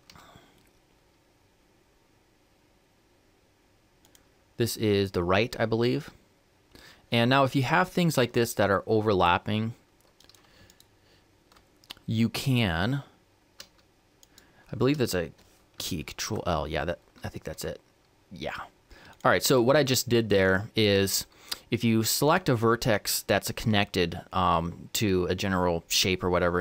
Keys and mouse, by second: 10.0-15.8 right drag, 15.8 ctrl+l, 17.3 g, 19.3 ctrl+z, 22.0-26.1 right drag.